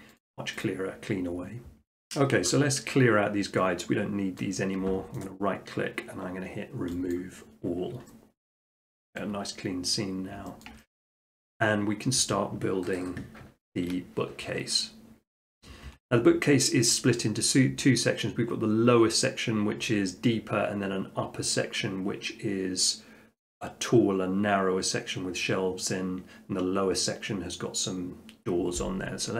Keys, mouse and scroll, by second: 0.2-1.7 drag, 4.4-5.3 middle drag, 5.3-6.3 right drag, 7.1-8.4 drag, 8.6-9.2 middle drag, 9.9 middle click, 10.1 middle click, 10.6 shift+middle click, 11.2 middle click, 11.6 middle click, 15.9 r.